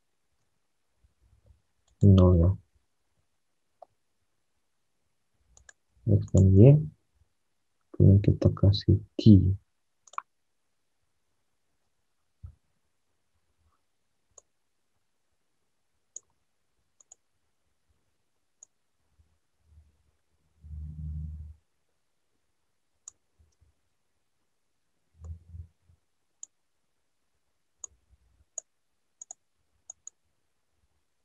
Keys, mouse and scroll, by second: 0.3 alt+Tab, 3.0 0, 3.5 Tab, 7.0 alt+Tab, 8.2 alt+Tab, 23.5 ctrl+z.